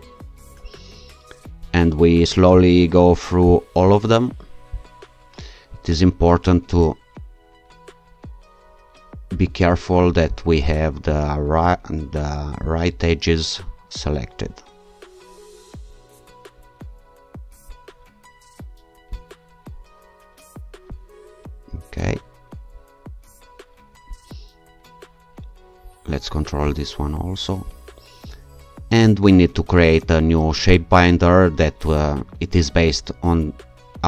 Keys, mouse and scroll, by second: 1.7-3.5 shift+scroll up 3, 3.5 ctrl+shift+click, 4.7 ctrl+click, 5.7-7.0 scroll down 2, 8.2-9.3 scroll up 3, 10.3 ctrl+click, 12.7 ctrl+click, 13.7-14.5 scroll down 2, 16.7-17.6 scroll up 2, 17.6-18.0 scroll up 1, 19.1 ctrl+click, 20.9 ctrl+click, 21.8-22.9 scroll down 2, 22.9 scroll down 1, 25.5-26.4 shift+scroll up 2, 26.4 shift+scroll up 1, 26.7-27.6 shift+scroll down 2, 27.6 shift+scroll down 1.